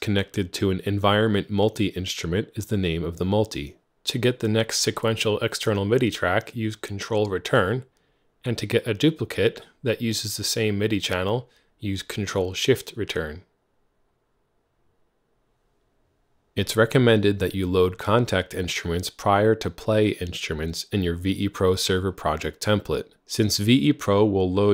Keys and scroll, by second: 3.0 ctrl+Return, 5.0 ctrl+shift+Return, 6.6 Up, 7.0-7.5 Up, 8.4 Down, 10.3 ctrl+shift+Return, 10.7 Down, 10.9 Down, 11.5 Delete, 12.0 Up, 12.9 ctrl+Return, 14.6 alt+c, 18.2 Tab, 18.8-21.6 typing, 23.8-24.7 typing.